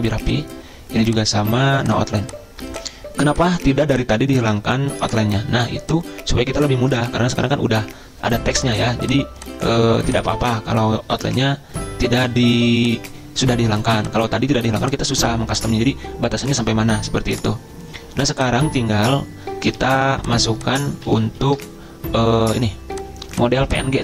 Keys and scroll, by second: 20.0 ctrl+z, 21.5 ctrl+shift+z.